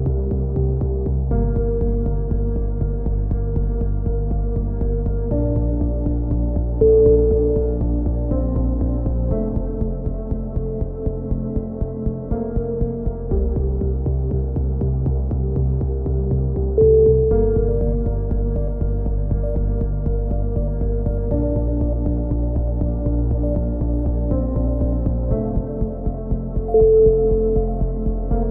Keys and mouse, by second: 0.6 click, 1.4-2.7 middle drag, 3.5 a, 3.6 middle click, 4.4-5.6 drag, 5.8 click, 7.1 click, 8.1 ctrl+z, 8.4-9.8 drag, 9.7 a, 10.2-11.4 middle drag, 11.5 ctrl+r, 13.5 middle click, 14.1 click, 17.3 right click, 17.5-18.8 middle drag, 18.8 click, 23.5-24.7 right drag, 24.8-25.9 drag, 27.8-28.5 right drag.